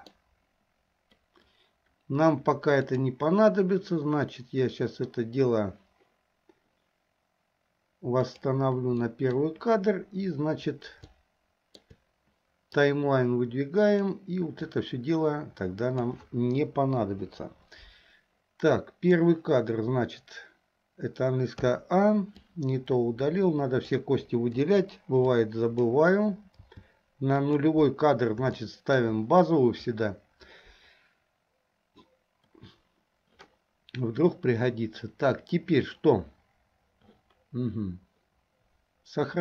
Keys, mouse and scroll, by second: 2.9 click, 8.4 click, 9.2 middle click, 11.3 shift+middle click, 13.2-16.1 drag, 17.1 Delete, 18.8 click, 21.7 a, 22.5-24.0 drag, 24.7 Delete, 25.5 click, 27.1 g, 28.7 middle click.